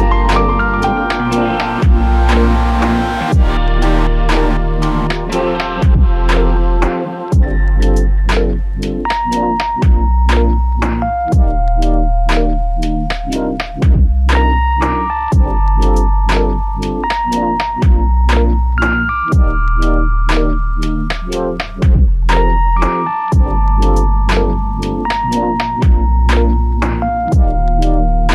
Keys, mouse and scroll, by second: 0.0 alt+click, 1.2 double click, 7.7 alt+click, 14.8 double click, 15.7 typing, 16.5 double click, 18.1 alt+click, 21.6 double click, 23.5 alt+click, 26.5 alt+click.